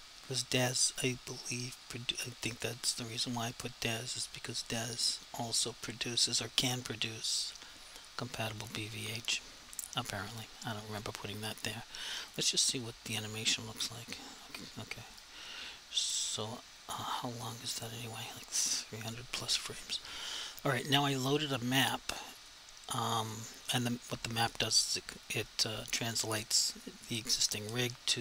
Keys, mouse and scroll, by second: 8.6 click, 12.3 click, 15.1 click, 22.6 click.